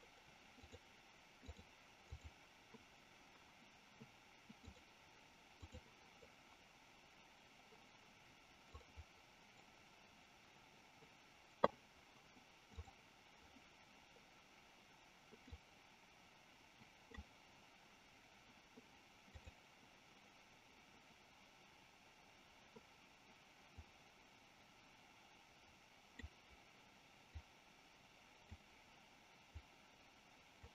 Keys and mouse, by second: 0.6 click, 4.6-5.8 drag, 8.8 click, 15.5-17.2 drag, 23.8-26.3 drag, 27.4-28.5 drag, 29.6-30.6 drag.